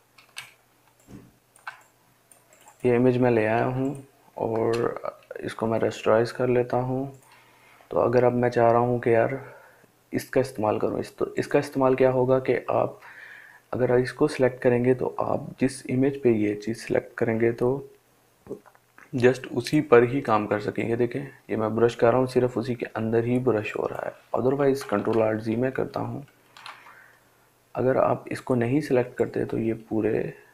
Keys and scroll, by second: 24.4 ctrl+alt+z.